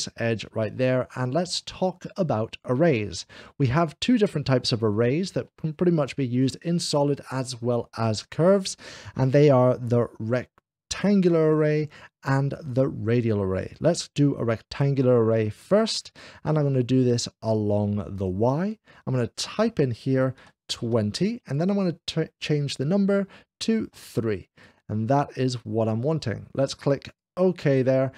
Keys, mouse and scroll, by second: 0.6-2.4 middle drag, 2.8-3.6 scroll up 1, 3.9-5.3 middle drag, 4.4 scroll up 1, 15.6 click, 18.0 click, 19.4 click, 20.4 2, 20.9 0, 21.3 click, 23.9 2, 23.9 0, 23.9 3, 24.4 click, 26.9 click.